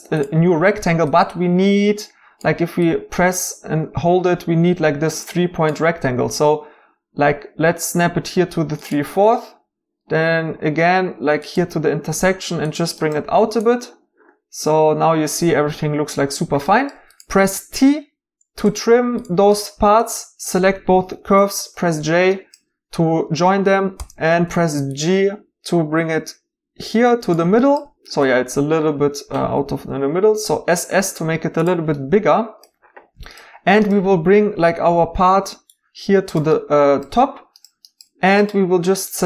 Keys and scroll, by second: 17.4 t, 21.2 j, 23.9 g, 29.5 typing, 34.9 g.